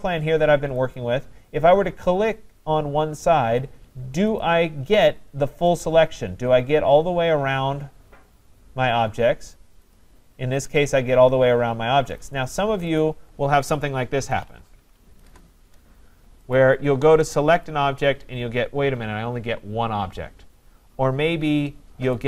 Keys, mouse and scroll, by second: 1.0 click, 4.4 click, 5.8 click, 10.0 click, 12.2 click, 13.0 click, 14.0-15.0 typing, 15.3 Return, 16.6 click, 17.7 click, 20.9 scroll, 22.1 shift+click.